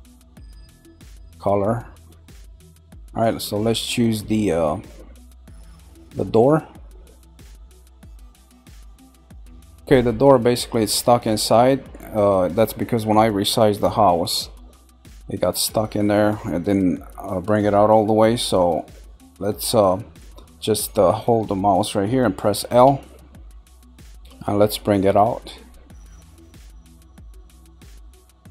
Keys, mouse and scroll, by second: 3.0-6.3 shift+middle drag, 6.3-6.8 scroll up 2, 7.5-9.8 shift+middle drag, 18.1-21.1 shift+middle drag, 22.9 l, 25.0 click.